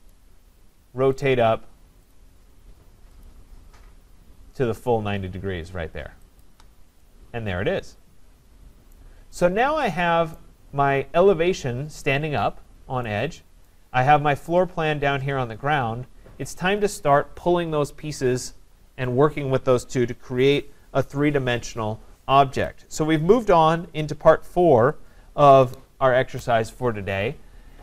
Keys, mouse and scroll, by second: 0.1 right click, 1.3 click, 2.2 click, 3.3 click, 6.4 shift+click, 8.9 right click, 9.4 click, 10.4 right click, 13.7 right click.